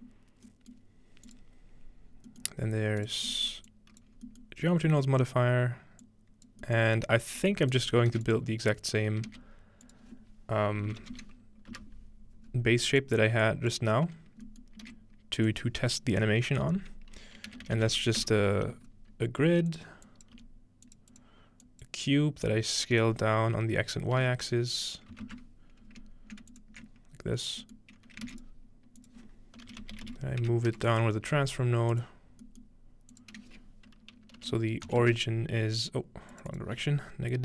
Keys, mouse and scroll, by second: 1.3-4.1 drag, 1.3-2.3 middle drag, 2.5-3.3 middle drag, 2.7-4.4 scroll up 1, 3.5 middle click, 4.7-5.7 scroll down 1, 6.0 click, 7.2-8.3 scroll down 1, 8.1 shift+a, 9.3 shift+a, 9.3-11.7 shift+drag, 10.9-12.2 typing, 12.9-16.7 drag, 14.5-16.0 middle drag, 14.9 shift+a, 17.4-18.3 typing, 19.7-23.7 drag, 20.4 g, 26.5 alt+shift+click, 27.7 middle click, 28.3 shift+a, 28.4 click, 29.6-31.0 typing, 31.9-34.9 drag, 32.5-34.4 middle drag, 34.4-35.4 typing, 36.3-37.4 drag.